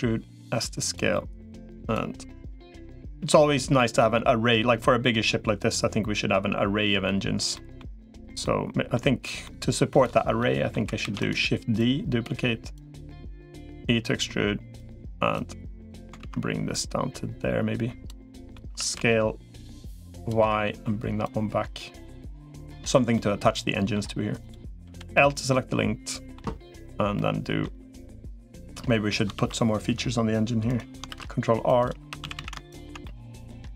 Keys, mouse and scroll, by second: 0.9 middle click, 2.3 l, 2.5 middle click, 3.9-7.3 drag, 7.3 middle click, 7.9 click, 8.2 middle click, 9.2 middle click, 10.2 middle click, 10.9 shift+d, 11.7 click, 12.5 click, 13.5 e, 15.1 click, 16.1 ctrl+z, 16.5-17.9 drag, 18.0 middle click, 18.5 s, 20.2 middle click, 21.1-22.1 drag, 22.1 middle click, 22.9 middle click, 24.7 l, 24.9-26.1 middle drag, 26.9 middle click, 27.8 middle click, 28.4 middle click, 29.1 ctrl+r, 30.9 ctrl+r, 31.9 3, 32.1 a, 32.8 middle click.